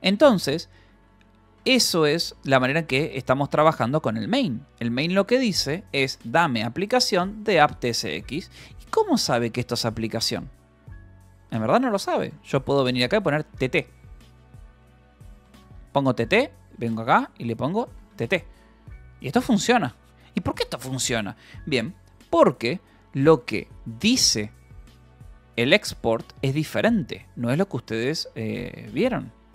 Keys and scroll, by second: 0.7 d, 1.9 k, 3.1 j, 3.5 Return, 4.3 Escape, 4.6 k, 6.0-8.5 typing, 8.4 Escape, 9.7-10.6 typing, 12.1 c, 13.8 Escape, 13.9-18.6 typing, 15.6 Escape, 18.2 Escape, 25.2 shift+u, 28.3 Escape, 28.5 u.